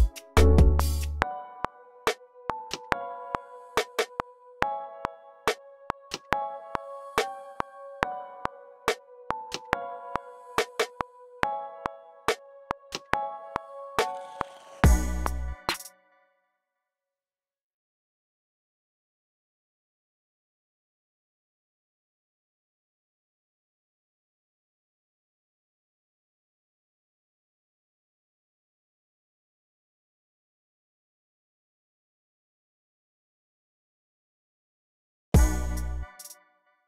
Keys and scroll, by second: 1.1-2.0 typing, 4.2-5.3 typing, 7.8-8.9 typing, 11.2-12.1 typing, 14.2 typing, 15.5-17.5 typing, 15.8 super+k, 16.4 super+a, 19.0 alt+super+s, 19.7 super+z, 20.2 super+d, 22.9 x, 25.5 x, 28.3 super+w, 32.2 v, 36.0 space, 36.6 super+k.